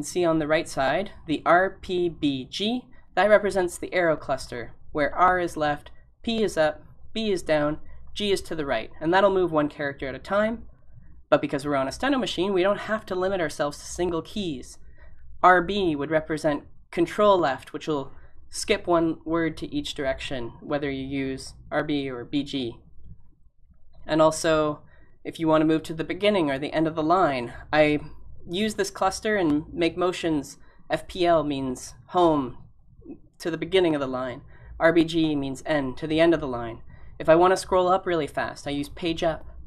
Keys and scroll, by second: 23.4 g.